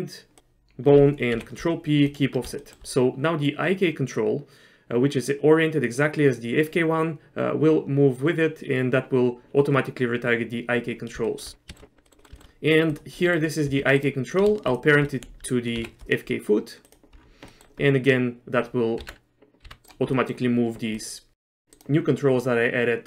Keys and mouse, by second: 1.4 ctrl+p, 2.7 shift+middle click, 11.3 shift+click, 11.7 shift+click, 12.1 middle click, 12.2 middle click, 12.4 shift+middle click, 13.0 click, 13.3 middle click, 13.8 g, 14.8 shift+click, 15.9 ctrl+p, 17.6 middle click, 19.1 Tab, 19.7 r, 20.2 middle click, 21.1 click, 21.4 middle click, 21.4 r.